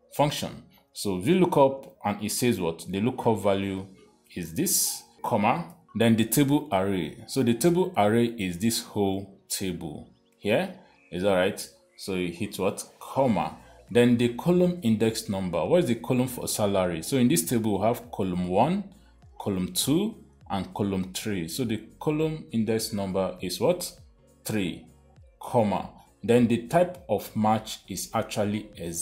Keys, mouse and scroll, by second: 1.8 click, 2.0 click, 4.9 click, 9.7 click, 13.6 ,, 24.8 3, 25.9 typing.